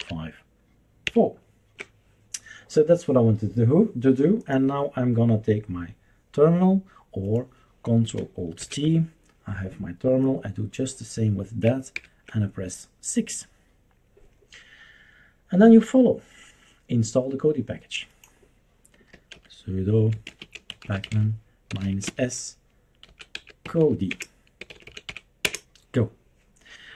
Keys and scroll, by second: 0.0 super+5, 1.0 super+4, 8.6 ctrl+alt+t, 12.0 super+6, 18.9-26.9 typing.